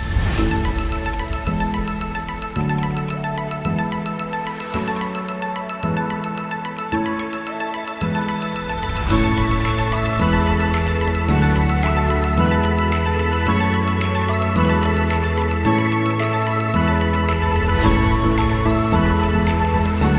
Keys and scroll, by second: 5.6 shift+Page_Up.